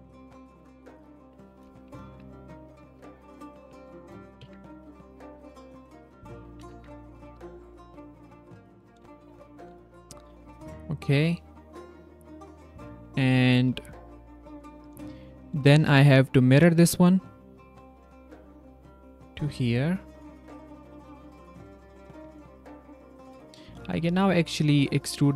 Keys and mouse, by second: 0.1 ctrl+c, 0.6 click, 1.9 c, 2.2 click, 3.2 click, 3.9 Tab, 4.6 middle click, 5.1 middle click, 5.8 ctrl+middle click, 6.7 Tab, 7.5 q, 8.4 q, 9.5 click, 10.6 Tab, 12.3 click, 15.0 s, 15.1 click, 15.9 q, 17.4 click, 18.5 q, 19.7 drag, 20.6 drag, 20.9 click, 21.3-21.8 drag, 21.3-21.8 middle drag, 21.3-21.8 right drag, 21.9 click, 22.1 Tab, 22.5 click, 22.5 middle click, 22.5 right click, 23.2 click, 23.5 shift+click, 23.9 s, 24.0 click, 24.7 drag.